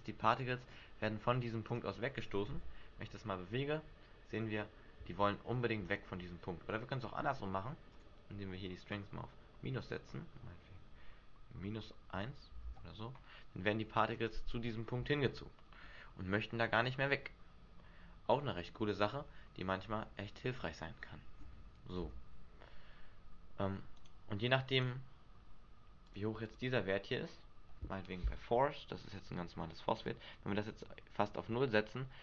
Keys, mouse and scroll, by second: 0.7-1.2 scroll down 3, 1.8 right click, 2.7 g, 6.1 right click, 6.3 Escape, 8.0 click, 9.1 click, 12.8 alt+a, 14.3 right click, 18.9 middle click, 22.1 g, 24.2 right click, 24.9 right click, 26.2 click, 26.6 click, 30.3 click.